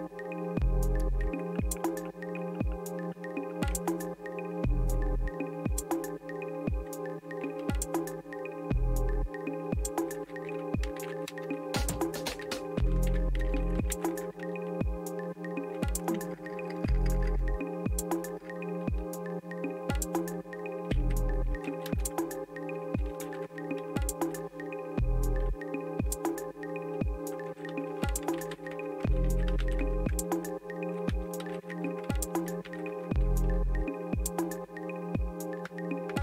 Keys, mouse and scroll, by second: 10.6-14.4 typing, 16.1-18.5 typing, 20.7-23.7 typing, 28.5-33.0 typing, 28.7 Tab.